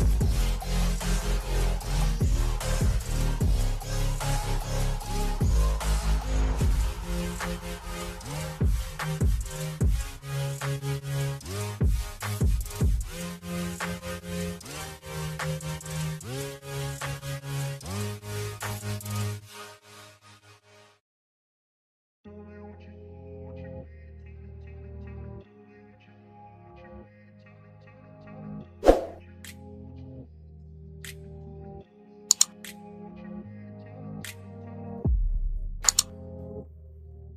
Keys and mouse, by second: 0.3 ctrl+h, 1.2 Right, 1.4 Right, 1.6 Right, 1.9 Right, 2.1 Right, 2.8 Right, 3.0 Right, 3.4 Left, 4.5 Return, 6.4 v, 7.1 click, 8.3 shift+Down, 8.9 shift+Down, 9.1 shift+Down, 11.1 shift+Down, 11.5 shift+Down, 14.1 shift+Up, 14.3 shift+Up, 14.6 shift+Up, 14.9 shift+Up, 15.0 shift+Up, 17.9 click, 19.7 Up, 20.9 click, 22.3 click, 25.5 shift+Down, 27.6 Right, 27.9 Right, 28.1 Right, 28.3 Right, 28.4 Right, 28.6 Right, 28.8 Right, 29.1 Right, 29.4 Right, 29.5 Right, 31.1 click, 32.1 Down, 34.7 Down, 34.9 Down, 35.2 Down, 35.4 Down, 35.7 Down, 35.9 Down, 36.1 Down, 36.5 Down, 36.8 Down, 36.9 Down.